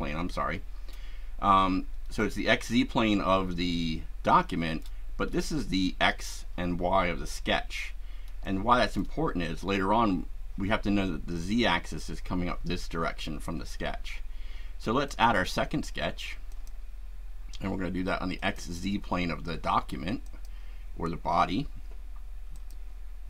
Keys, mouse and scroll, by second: 2.2-5.0 shift+right drag, 8.4-9.2 shift+right drag, 15.0 click, 16.5 click, 18.4 click, 20.2 click, 22.5 click.